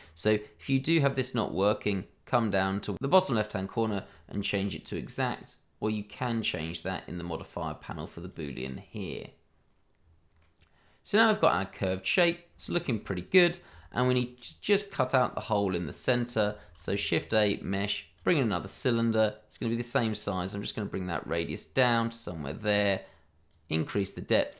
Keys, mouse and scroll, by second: 1.8 click, 3.8 click, 10.0-10.3 scroll down 1, 10.4 middle click, 12.5 shift+middle click, 12.6 middle click, 15.3 click, 15.7-16.1 scroll down 1, 16.1 click, 16.6 shift+a, 18.1 click.